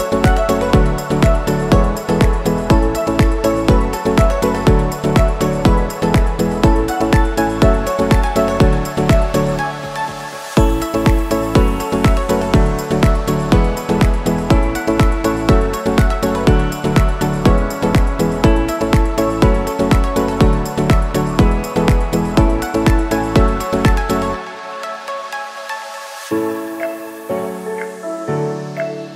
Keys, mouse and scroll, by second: 0.2 scroll down 1, 2.1 ctrl+t, 3.0-8.3 drag, 8.3 Return, 9.0 scroll down 1, 10.5 scroll up 1, 11.5 scroll up 1, 11.6 space, 11.8 click, 12.8 ctrl+t, 13.7 click, 14.5 Return, 15.5 click, 16.6 ctrl+z, 18.8 scroll down 1, 20.8 scroll up 1, 21.6 space, 21.8 click, 22.1 space, 22.5 scroll up 1, 23.0 click, 23.8 click, 24.5 shift+Up, 25.2 shift+Down, 26.4 scroll down 1, 27.0 click, 27.5 scroll down 1, 28.6 scroll up 1.